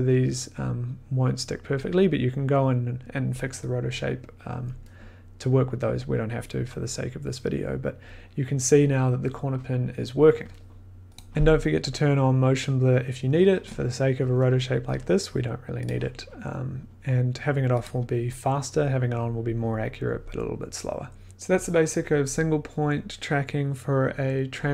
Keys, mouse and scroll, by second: 11.2-15.5 drag, 17.8 click.